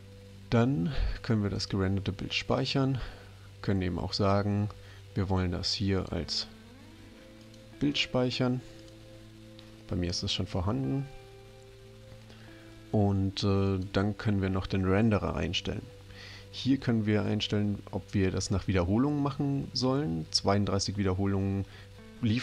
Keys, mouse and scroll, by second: 1.6 click, 6.0 click, 7.4 click, 8.8 click, 13.7 click.